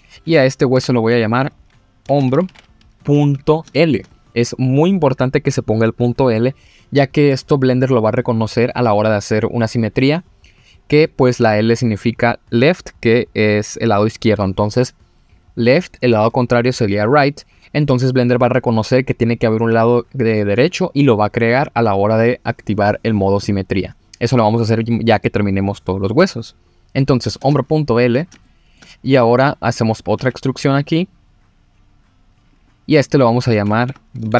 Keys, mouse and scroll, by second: 0.7 F2, 28.0 scroll down 1, 28.4 shift+middle click, 29.7 click, 30.2 e, 32.5 click, 33.1 click, 33.9 F2.